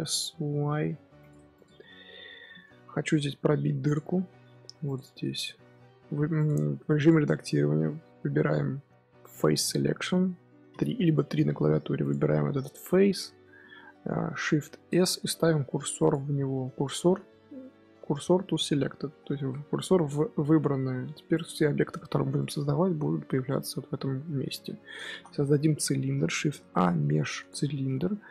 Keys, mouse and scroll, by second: 1.3 Tab, 1.4 click, 1.6 scroll down 2, 1.7-2.2 middle drag, 2.2 z, 2.5-3.0 scroll up 4, 3.0 KP_3, 3.3 KP_1, 3.8 click, 4.0 scroll up 2, 4.2 Tab, 4.5 3, 4.8 click, 5.4 shift+s, 6.1 Tab, 6.3 click, 6.9 click, 7.3 Tab, 9.5 click, 9.8-10.6 scroll up 4, 10.6 3, 11.9 click, 14.8 shift+s, 16.3-16.9 scroll down 1, 16.9 shift+s, 17.9 shift+s, 19.3 middle click, 19.6 scroll up 1, 20.4-21.0 scroll down 3, 21.0 Tab, 21.2 click, 21.8-24.9 middle drag, 25.0 shift+a.